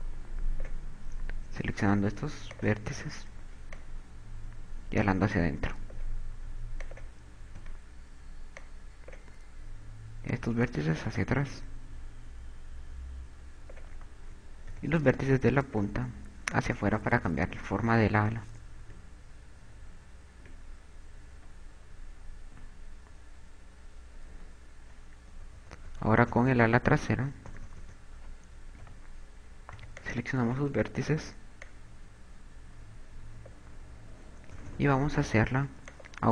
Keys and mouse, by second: 3.3 click, 4.3 click, 7.1 a, 7.6 click, 7.7 b, 10.9 click, 14.6 a, 15.1 b, 16.1 click, 19.5 Tab, 20.3 Tab, 20.3 z, 23.3 a, 25.3-31.3 typing, 34.8 KP_2, 34.9 KP_2.